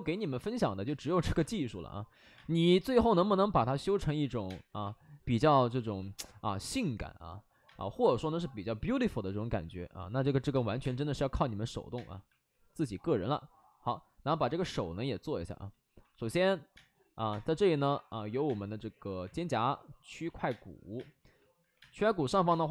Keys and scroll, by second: 0.8 space, 1.3 space, 2.3 space, 2.5 ctrl+z, 3.0 ctrl+z, 4.0 ctrl+z, 4.2 ctrl+z, 4.4 space, 4.7 ctrl+z, 7.6 space, 8.7 5, 9.5 ctrl+z, 10.7 space, 10.7 2, 11.0 2, 11.9 space, 15.7 ctrl+z, 15.8 ctrl+z, 16.7 space, 17.2 space, 18.4 space, 19.1 1, 20.4 space, 21.6 2, 21.7 space, 22.4 space.